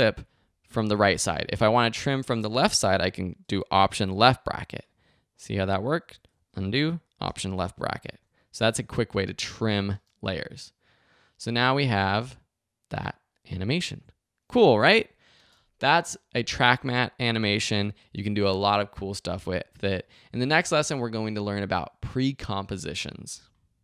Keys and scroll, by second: 4.1 alt+[, 6.3 super+z, 7.2 alt+super+[, 7.9 alt+super+[, 8.1 alt+super+z, 8.6 super+z, 9.9 space, 15.3 space.